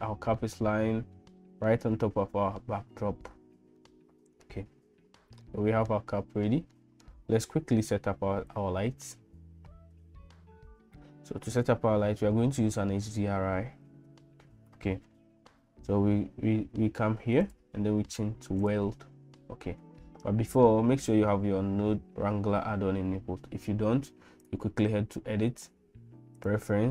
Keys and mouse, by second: 0.5-1.7 middle drag, 3.8 middle click, 5.5 middle click, 6.7 shift+middle click, 10.5 n, 17.4-18.8 drag, 24.4-26.9 drag.